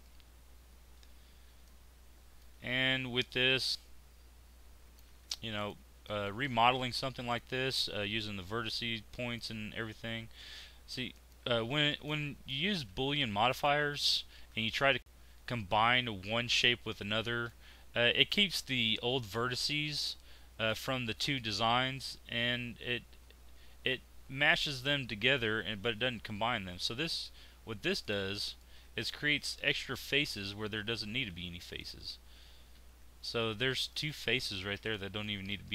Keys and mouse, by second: 3.9 middle click, 5.5-8.5 middle drag, 8.5-10.4 drag, 10.4 z, 11.9 click, 12.9 z, 21.3 middle click, 23.2 z, 28.4 middle click, 28.6-30.3 middle drag, 30.3 z, 31.3 z, 32.7 z.